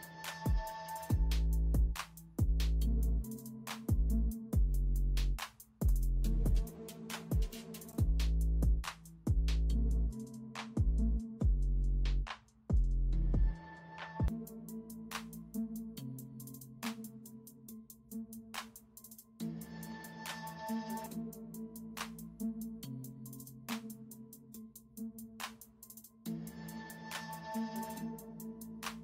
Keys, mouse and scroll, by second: 0.0-0.8 typing, 2.0-4.2 typing, 5.6 typing, 7.2 ], 7.7 space, 8.5 space, 10.2-12.5 typing, 13.1 ctrl+alt+z, 15.0 space, 18.8-20.5 typing, 22.0-23.2 typing, 24.7-26.4 typing, 28.0-29.0 typing.